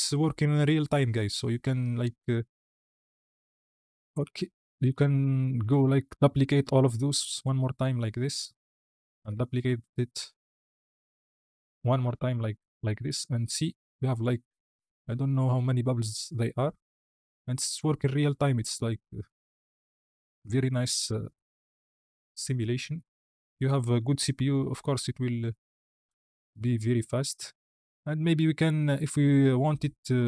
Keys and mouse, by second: 2.1 space, 2.9-3.2 drag, 3.6 alt+v, 5.7 Tab, 6.2 a, 8.0 shift+d, 11.3 shift+d, 11.6 click, 12.3 Tab, 12.7 click, 13.7 space, 21.1 KP_1, 26.0 space.